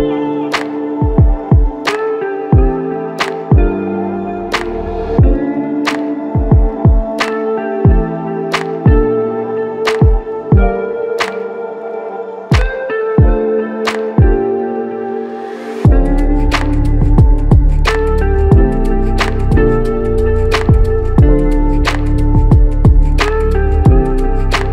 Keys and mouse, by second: 0.7 alt+shift+click, 3.9 double click, 11.4 double click, 12.6 ctrl+alt+click, 13.8 alt+click, 15.6 ctrl+alt+click, 19.4 alt+click, 21.6 double click.